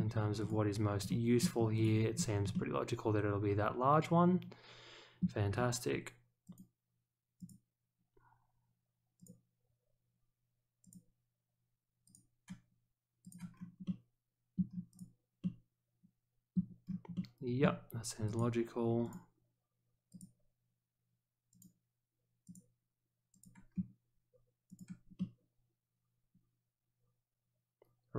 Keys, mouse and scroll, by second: 0.4 click, 1.0-1.4 middle drag, 1.7 click, 2.1 scroll up 1, 2.5-5.2 middle drag, 6.4 click, 7.3 click, 9.1 click, 10.8 click, 12.0 click, 13.2 click, 13.5-13.8 scroll up 1, 13.8-14.5 middle drag, 14.9 click, 15.4-16.5 middle drag, 16.8 scroll down 1, 17.1 middle click, 18.2 click, 19.0 click, 20.1 click, 21.5 click, 22.4 click, 23.3 click, 24.6 click, 25.1-28.1 middle drag.